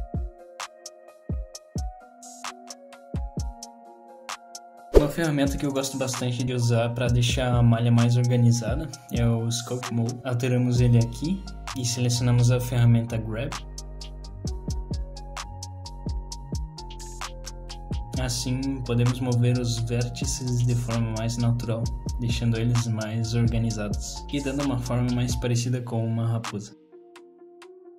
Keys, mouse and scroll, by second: 0.1 middle click, 5.3 scroll down 3, 5.6 shift+middle click, 8.8 click, 12.9 click, 16.5 middle click, 19.8 click, 22.1 click, 26.9 click, 27.3 middle click.